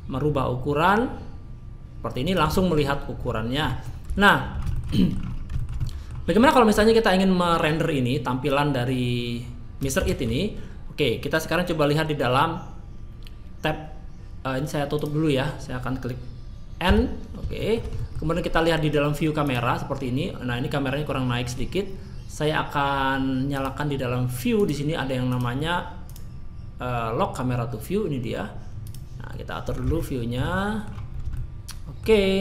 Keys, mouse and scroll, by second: 2.5 middle click, 3.2-3.6 scroll down 2, 3.6 middle click, 4.1 Tab, 4.4 scroll up 3, 4.7 shift+middle click, 4.9 middle click, 5.3 scroll down 2, 5.5 shift+middle click, 5.8 middle click, 6.3-6.7 scroll down 2, 6.6 scroll up 3, 6.8 scroll down 1, 8.5 click, 10.0 shift+middle click, 14.9 click, 16.8 n, 17.5 shift+middle click, 17.9 middle click, 19.4 click, 24.5 click, 25.3 click, 26.0 click, 28.8 click, 29.3 middle click, 30.0 shift+middle click, 30.5 middle click, 31.0 scroll down 1, 31.3 shift+middle click.